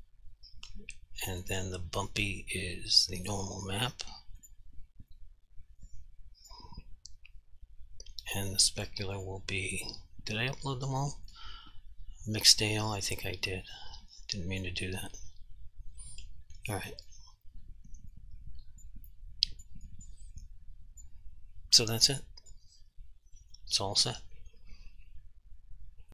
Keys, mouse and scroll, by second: 2.1 click, 2.2 click, 5.3 click, 9.3 click, 13.6 click, 17.1 click, 18.3 alt+click, 19.3 alt+click, 20.0 alt+click, 20.6 alt+click, 21.4 alt+click.